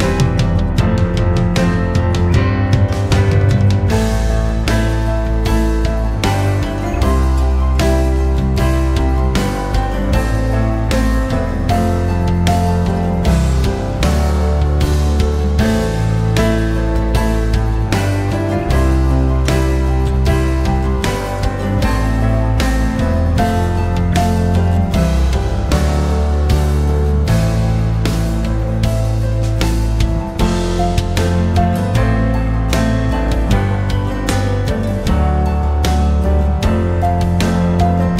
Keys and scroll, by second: 4.1 5, 4.4 Return, 8.1 e, 10.7 w, 21.2 ctrl+c, 22.4 m.